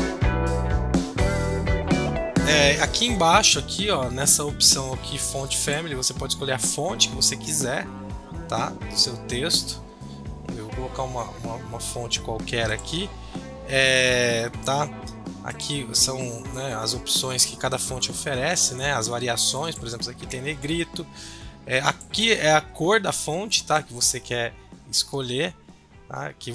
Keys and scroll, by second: 0.0-1.5 typing.